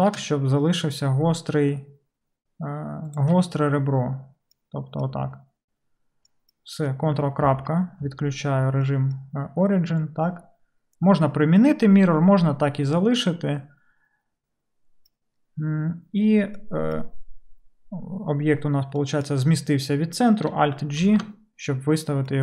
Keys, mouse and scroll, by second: 3.4-4.7 middle drag, 5.4-7.7 middle drag, 7.5 ctrl+., 9.1-21.0 middle drag, 21.0 alt+g.